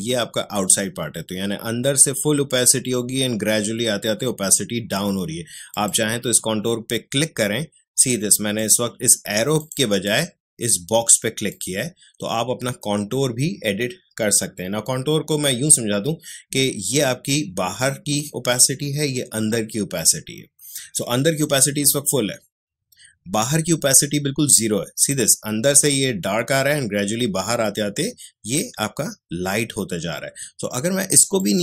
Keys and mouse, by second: 5.7 click, 8.5 click, 31.3-31.6 drag.